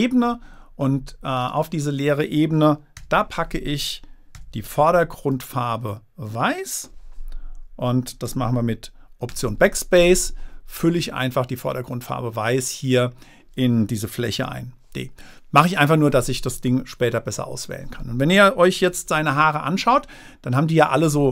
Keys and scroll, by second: 3.3 d, 4.7 x, 9.7 alt+BackSpace, 14.7 super+d.